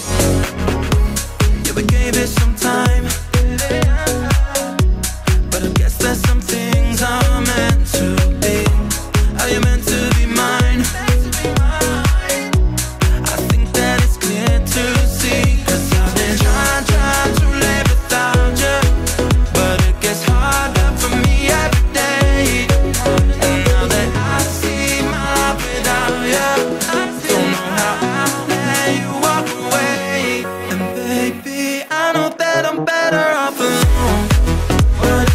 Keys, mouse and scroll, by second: 8.1 click, 8.8 middle click, 9.3-9.6 scroll down 3, 9.6 middle click, 10.0-10.9 scroll up 7, 10.2 middle click, 10.9 middle click, 11.3-13.6 drag, 16.1 click, 20.8-21.9 middle drag, 21.9-24.1 drag, 24.3-26.4 drag, 27.3 click, 31.9-32.5 scroll down 13, 32.5-33.5 middle drag, 33.5 click.